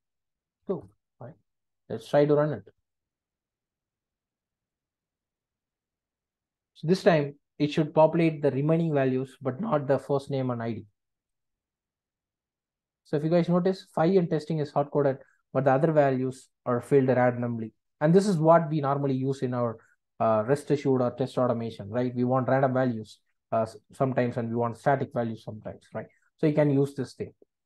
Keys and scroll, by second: 0.8 Return, 5.1 ctrl+r.